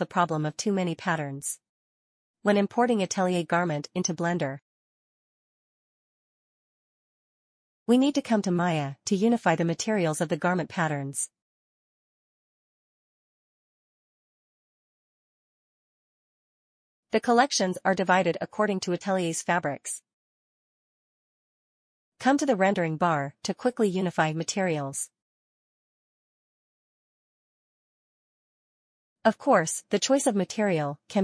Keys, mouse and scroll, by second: 1.0 click, 4.2 click, 4.8 click, 6.7 click, 11.1 click, 12.9 click, 15.7 alt+middle click, 17.1 alt+middle click, 18.4 alt+middle click, 18.5 click, 20.2 double click, 21.8 click, 24.4 click, 27.5 click.